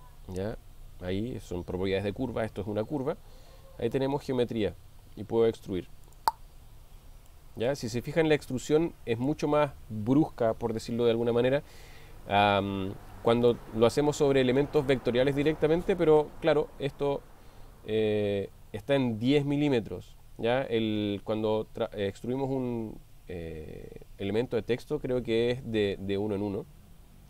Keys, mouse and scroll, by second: 6.2 click, 7.3-9.4 middle drag, 13.8-15.6 middle drag.